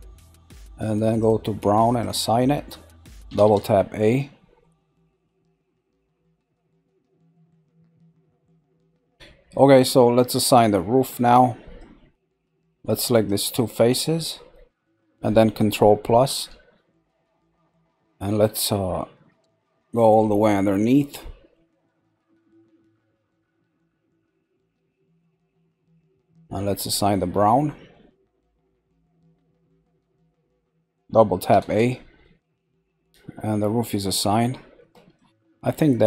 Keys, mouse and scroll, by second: 1.1 click, 1.9 click, 3.3 a, 4.6-9.8 middle drag, 9.8-10.6 scroll up 1, 10.6-12.3 shift+middle drag, 12.3 click, 13.2 shift+click, 13.8 scroll down 1, 14.2-16.4 middle drag, 21.2-24.2 middle drag, 24.3 middle click, 24.9 middle click, 25.1-28.4 middle drag, 28.4 click, 29.6 click, 30.2 scroll down 1, 31.5 a, 32.2 middle click, 33.1-33.8 scroll up 3, 33.8-36.0 shift+middle drag.